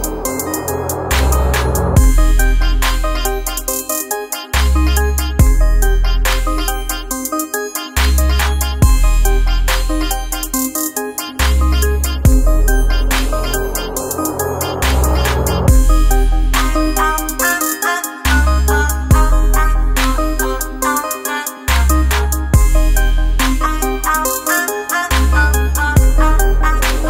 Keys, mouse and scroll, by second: 7.0 ctrl+space, 7.2 ctrl+click, 7.5 ctrl+space, 9.8-12.3 drag, 14.2 alt+scroll down 1, 14.7 click, 16.5 shift+click, 18.7-25.2 drag.